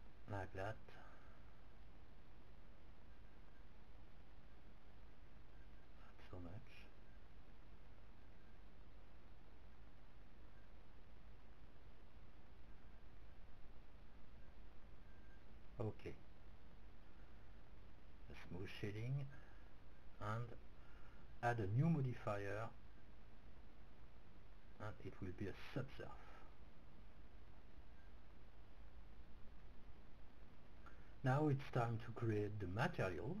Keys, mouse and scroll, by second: 3.1-5.3 middle drag, 5.5-6.9 drag, 7.9 s, 11.9-13.1 drag, 14.1-16.7 middle drag, 17.4 Tab, 18.9-20.9 drag, 22.4-27.2 drag, 27.3 click, 30.5-33.4 drag.